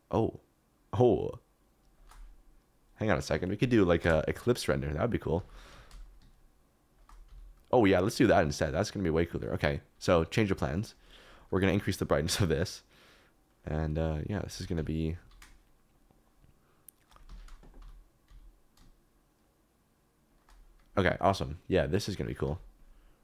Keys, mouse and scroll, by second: 2.0 shift+click, 4.0 KP_0, 5.3 s, 5.7 z, 7.2 s, 7.9 click, 9.1 click, 10.7 click, 11.7-13.6 drag, 14.4 s, 14.7 y, 15.1 z, 17.2 Escape, 17.8 s, 18.2 z, 20.3 shift+click, 21.1 shift+click, 22.4 s, 22.9 s.